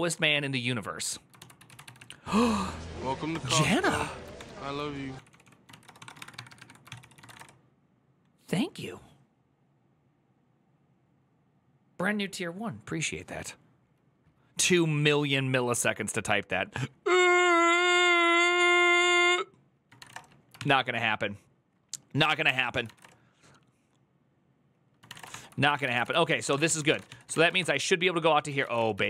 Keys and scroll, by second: 1.1-2.3 typing, 3.1 Return, 4.1 ctrl+d, 4.7-7.5 typing, 20.1-20.8 typing, 22.4 ctrl+c, 22.6 typing, 22.8 Return, 24.9-29.0 typing, 25.0 Return, 25.1 ctrl+d, 25.5 ctrl+c, 25.7 Return, 25.8 ctrl+u.